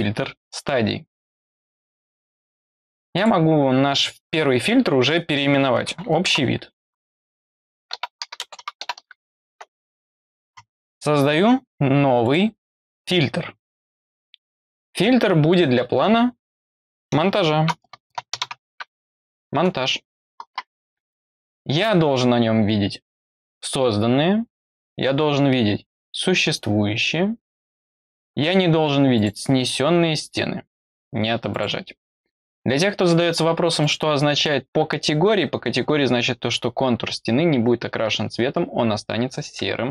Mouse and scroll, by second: 3.1 click, 12.2 click, 13.9 click, 29.1 click, 31.4 click, 33.7 click.